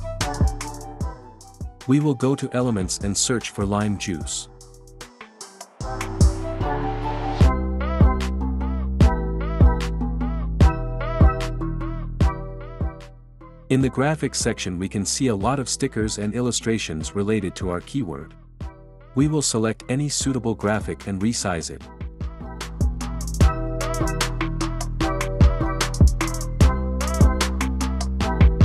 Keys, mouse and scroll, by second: 1.2-1.9 drag, 4.2 click, 5.5-8.1 typing, 11.5 click, 12.4 drag, 21.0 click.